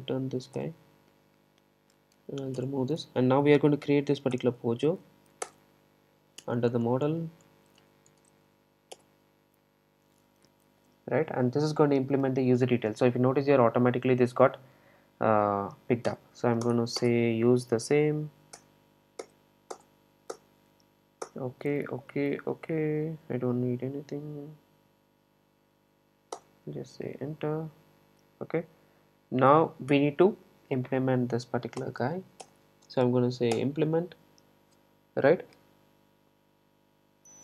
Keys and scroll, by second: 0.6 Return, 16.2 Return, 31.8 alt+Return.